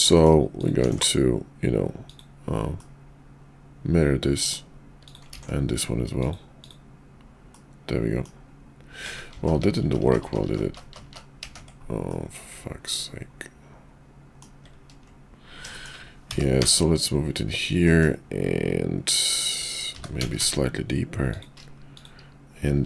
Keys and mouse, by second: 0.2 middle click, 0.9 alt+x, 2.1 click, 2.8-4.5 middle drag, 5.3 alt+x, 6.2 click, 6.6 click, 7.5 middle click, 9.4-10.0 ctrl+z, 10.3 ctrl+z, 10.5-11.7 ctrl+z, 12.1-14.4 middle drag, 15.7 shift+middle click, 16.2 g, 17.8 middle click, 19.9 g.